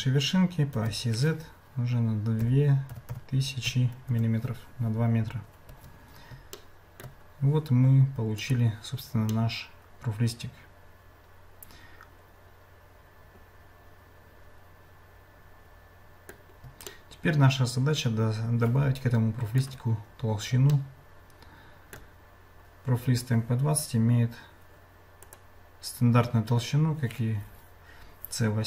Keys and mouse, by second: 5.7 Tab, 6.6 shift+middle click, 8.7 click, 9.3-16.3 middle drag, 16.9-19.6 shift+middle drag, 20.7-21.9 shift+middle drag, 25.3-28.6 drag.